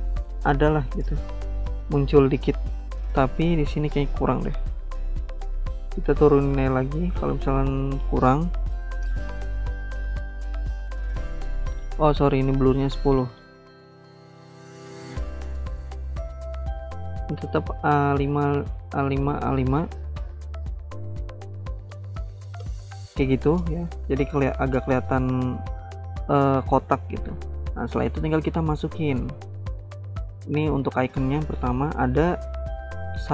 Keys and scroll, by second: 12.7-13.6 typing, 13.7 Return, 17.8-20.3 typing, 28.0 alt+Tab.